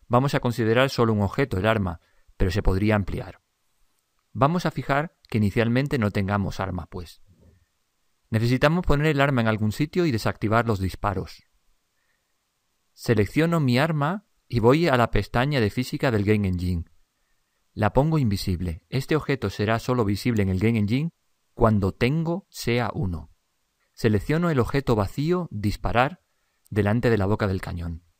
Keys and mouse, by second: 2.3 click, 15.0 click, 25.8-28.1 drag.